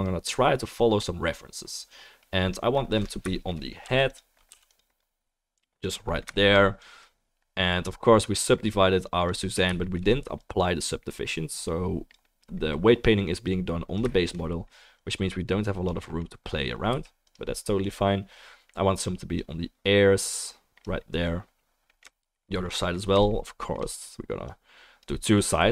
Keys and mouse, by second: 0.0-4.1 drag, 0.0-4.1 middle drag, 0.0-9.6 right drag, 4.1 f, 4.9 f, 5.0-9.6 drag, 5.0-9.6 middle drag, 16.3-17.3 drag, 16.3-17.3 middle drag, 16.3-23.3 right drag, 17.3 f, 19.3-25.7 drag, 19.3-23.3 middle drag.